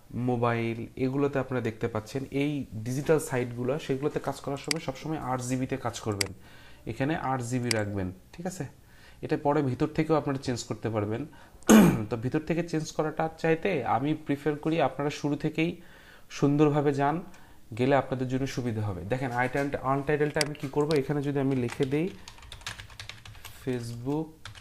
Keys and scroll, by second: 21.3-24.6 typing.